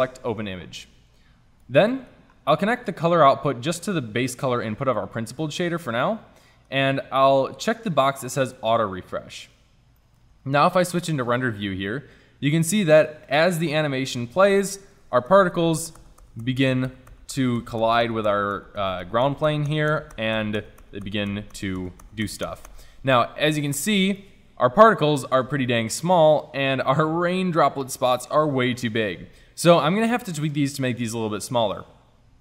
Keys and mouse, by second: 0.0 a, 6.0-8.5 middle drag, 8.5-10.2 drag, 10.6 shift+z, 13.4-15.1 drag, 15.1 Right, 15.3 Right, 26.9-32.3 middle drag, 32.3-32.4 drag.